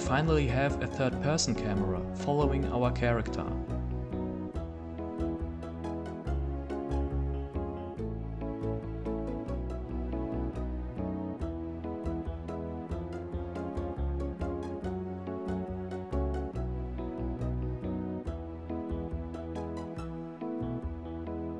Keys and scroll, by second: 1.4 w, 5.4 a, 7.0 s, 10.0 w, 11.4 d, 12.8 s, 15.2 a, 17.8 w.